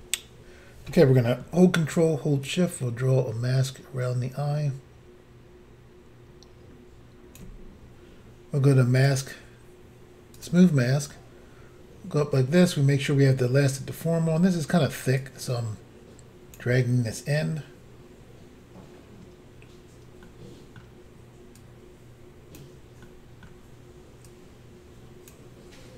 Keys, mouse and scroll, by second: 9.0 click, 9.1 click, 10.4 click, 10.4 click, 11.2 middle click, 15.2 click, 20.3 middle click, 21.6 click, 23.1 middle click, 24.3 click.